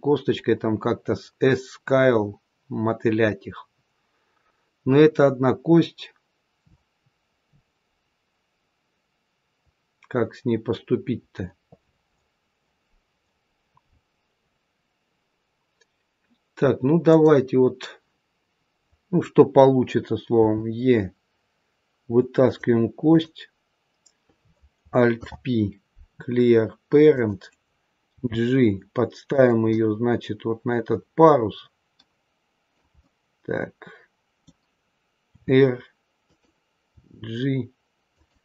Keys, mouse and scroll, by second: 17.0 click, 20.3 e, 23.0 click, 25.1 alt+p, 28.1 g, 29.7 middle click, 32.9 middle click, 35.2 r, 36.9 g.